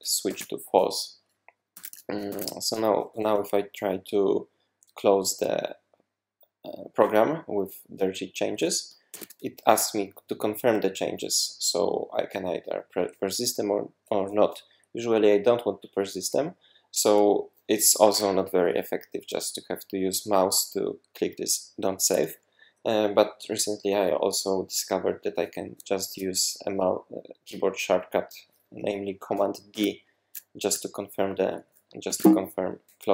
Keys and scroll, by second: 0.0-0.4 typing, 1.7 super+`, 2.3 super+`, 9.1 super+q, 29.7 super+d, 32.1 super+d, 32.6 super+d.